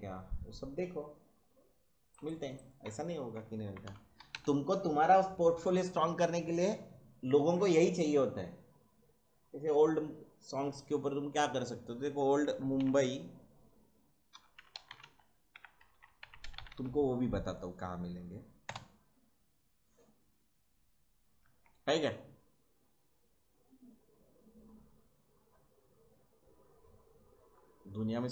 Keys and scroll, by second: 3.3-4.7 typing, 12.5 m, 12.8 u, 14.1-17.2 typing, 18.6 Return.